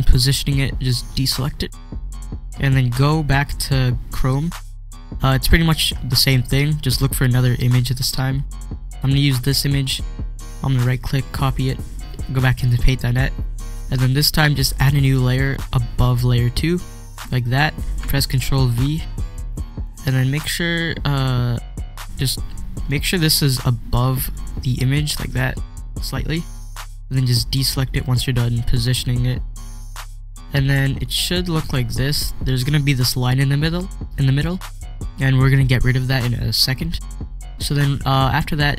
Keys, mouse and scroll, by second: 1.2 click, 1.3 click, 4.0 click, 4.4 scroll up 1, 5.7 scroll down 1, 6.4 scroll down 1, 6.9 scroll down 1, 8.5 scroll down 1, 9.2 click, 10.7 right click, 11.5 click, 15.3 click, 15.5 click, 18.7 ctrl+v, 19.8-25.4 drag, 28.6 click.